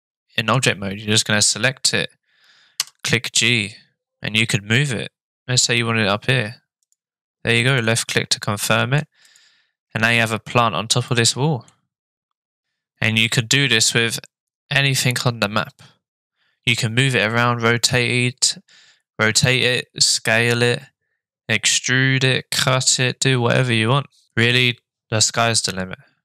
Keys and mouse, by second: 2.8 g, 8.0-9.1 shift+middle drag, 9.2 middle click, 11.1-11.7 middle drag.